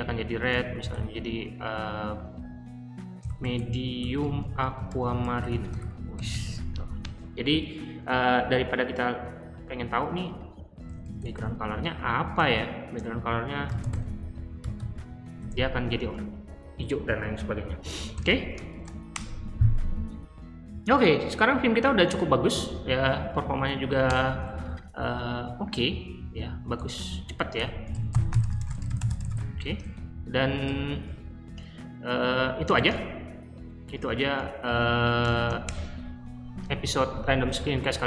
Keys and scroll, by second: 0.0-1.4 typing, 3.0-6.8 typing, 9.6 typing, 10.7-11.3 typing, 12.4-15.4 typing, 18.0-19.1 typing, 23.3 Up, 24.0 Return, 26.4-29.2 typing, 30.4-31.4 typing, 32.7-33.5 typing, 34.7-35.7 typing.